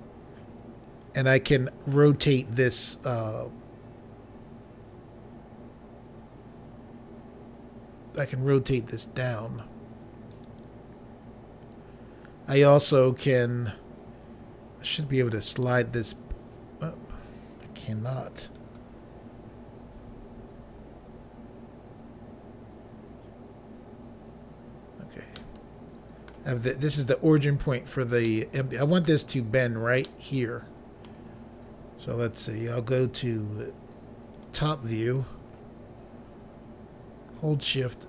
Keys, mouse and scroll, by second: 10.4 right click, 15.4 click, 18.6 right click, 25.4 middle click, 26.7-27.3 scroll up 2, 28.4 middle click, 30.1 scroll down 1, 30.2 middle click, 34.4 click, 35.3-35.8 scroll up 3.